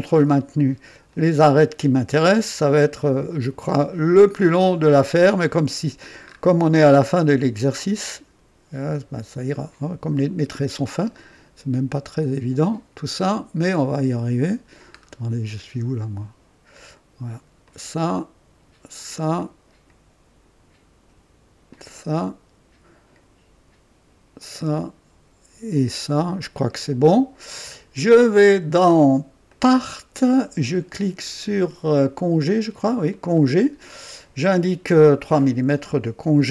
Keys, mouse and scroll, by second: 1.1 click, 3.0 click, 4.7 ctrl+click, 6.2 scroll up 1, 7.9 click, 9.5 ctrl+click, 10.5 ctrl+click, 11.2-14.9 ctrl+drag, 15.1 ctrl+scroll down 1, 17.6 ctrl+click, 19.0 ctrl+click, 19.4-20.1 ctrl+drag, 21.7 ctrl+click, 22.2-23.3 drag, 24.4 click, 25.7 ctrl+click, 28.4 click, 29.5 click, 33.1 click, 35.2 click, 36.4 KP_3.